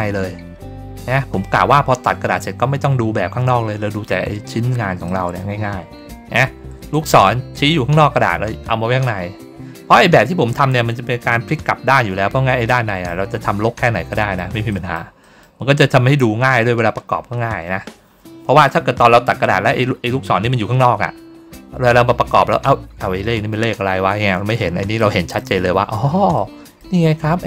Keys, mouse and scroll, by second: 0.0 ctrl+scroll down 2, 0.9 ctrl+scroll down 2, 1.3 middle click, 4.9 middle click, 5.6 ctrl+middle click, 12.6 middle click, 13.3 ctrl+middle click, 14.0 middle click, 14.6 middle click, 15.1 middle click, 15.8 ctrl+scroll down 1, 16.9 ctrl+scroll down 1, 18.6 middle click, 19.4 ctrl+middle click, 24.9 middle click, 26.2 middle click.